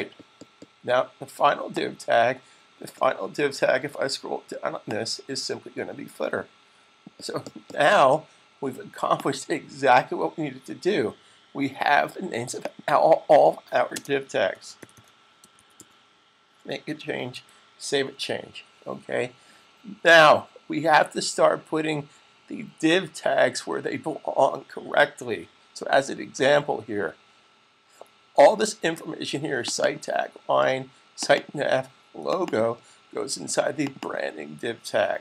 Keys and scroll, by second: 14.4-16.2 typing, 17.2 super+s.